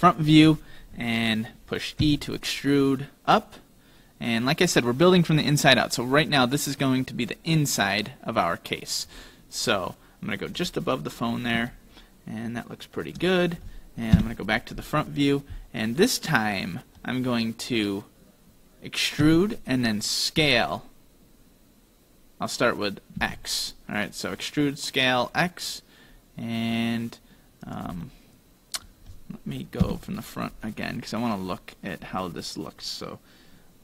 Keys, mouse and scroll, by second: 2.1 e, 9.7 middle click, 10.8-12.4 scroll up 4, 11.7 shift+middle click, 14.2 KP_1, 15.9 middle click, 19.3 e, 28.1 middle click, 29.8 KP_1.